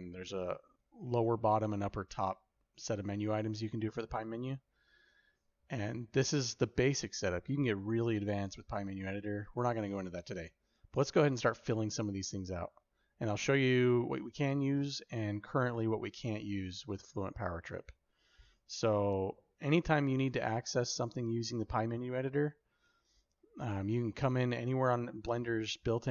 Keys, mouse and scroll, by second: 16.8 click, 23.6-24.5 drag, 25.6-26.1 drag.